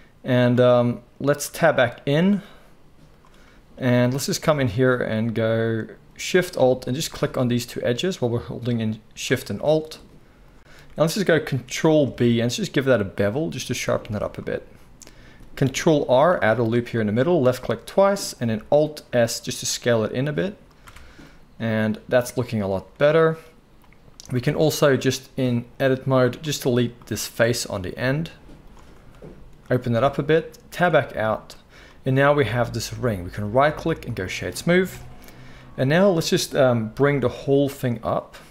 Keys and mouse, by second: 1.4 Tab, 4.4 alt+a, 7.0-10.5 alt+shift+middle drag, 10.5 click, 10.5-12.2 middle drag, 12.0 ctrl+b, 16.1 ctrl+r, 18.5 alt+s, 18.5-25.7 alt+middle drag, 20.8 Tab, 24.3 Tab, 25.7-27.1 drag, 27.1-33.3 middle drag, 27.9 x, 30.7 Tab, 33.3-33.8 drag, 33.8-38.5 right drag, 34.9 KP_1, 36.9 g.